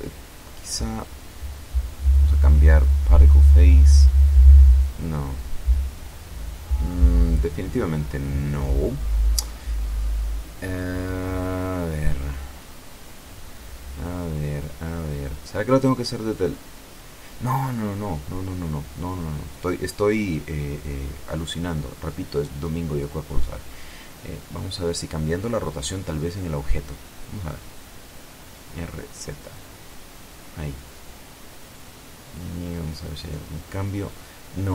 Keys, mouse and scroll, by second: 0.6 click, 3.5 click, 4.8-7.3 drag, 12.0-14.0 drag, 15.5 t, 20.6-21.6 drag, 25.9 click, 27.7 right click, 29.0 r, 29.3 z, 31.5 click, 33.3 click.